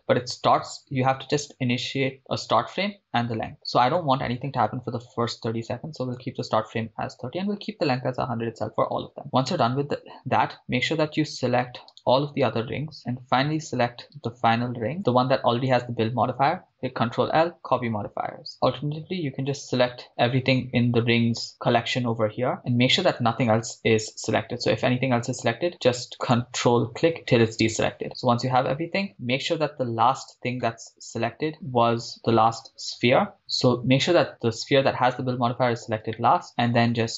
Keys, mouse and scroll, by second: 2.4 shift+space, 3.8-6.9 drag, 12.2 click, 12.2 right click, 13.0 shift+right click, 14.4 shift+click, 14.4 shift+right click, 16.7 ctrl+l, 18.5 scroll down 8, 18.7-21.5 drag, 22.6 click, 25.7 ctrl+click, 26.2-27.1 ctrl+drag, 27.4-28.6 scroll down 8, 30.9 scroll up 3, 31.5 ctrl+z, 31.5 shift+right click, 32.1-32.6 scroll down 4, 32.6 scroll up 1, 33.2 scroll up 3, 33.4 shift+right click, 35.3-35.9 scroll down 6, 36.2-37.1 shift+middle drag.